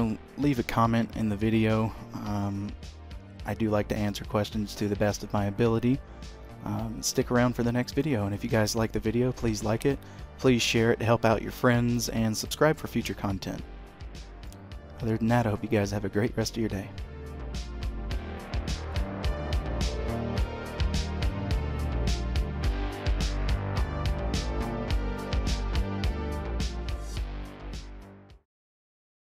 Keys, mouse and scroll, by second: 1.3-2.0 scroll down 1, 2.0-4.2 scroll down 1, 4.2 middle click, 14.6 middle click.